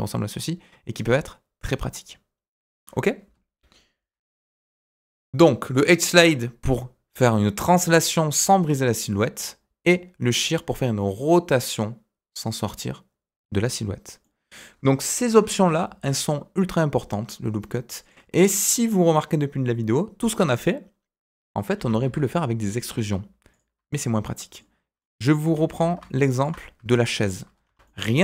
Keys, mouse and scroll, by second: 3.9 Delete, 14.2 middle click, 15.2 KP_1, 15.8 shift+a, 21.7 s, 23.8 middle click, 24.9 middle click, 25.4 s, 27.6 Tab, 27.8 middle click.